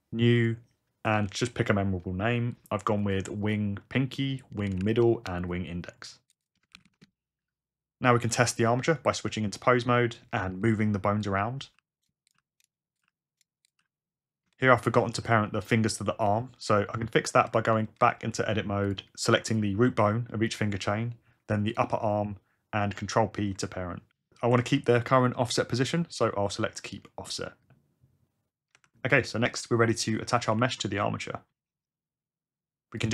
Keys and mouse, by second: 3.7 ctrl+F2, 4.2-5.3 drag, 4.7 d, 6.0 ctrl+F2, 6.3 click, 10.3 Tab, 11.3-13.8 typing, 14.5-14.9 shift+drag, 15.5 r, 16.2 click, 16.9 Tab, 18.9 click, 20.5 shift+click, 23.2 ctrl+p, 28.7 Tab, 29.9 click, 30.5 r, 31.8 Tab.